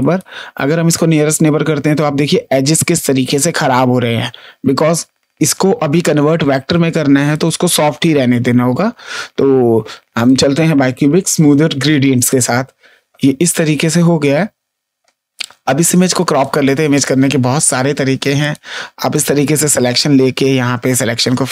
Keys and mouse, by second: 1.2 click, 7.2 click, 10.2 click, 12.2 click, 16.0 space, 16.3 click, 18.3 click.